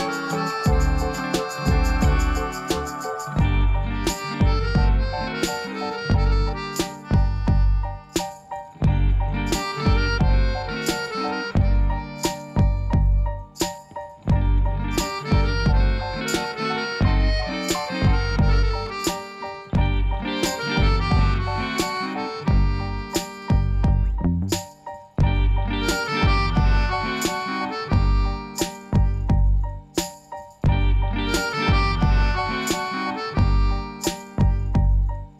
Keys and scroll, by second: 8.5 ctrl+b, 12.0 3, 14.4 shift+d, 14.5 z, 25.3 2, 25.8 Tab, 27.5 Tab, 28.4 Tab, 29.6 shift+a, 34.6 g, 34.8 z.